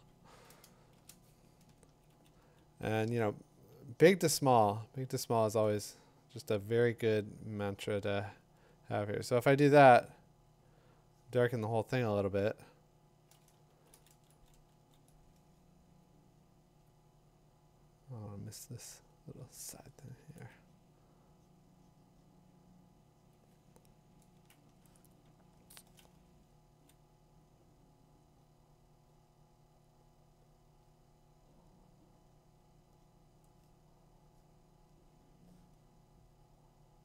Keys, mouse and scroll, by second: 3.1 [, 13.7 [, 13.9 [, 14.5 [, 14.8 [, 16.9-19.9 drag, 20.3 2, 25.0 click, 25.7 click, 29.7 [.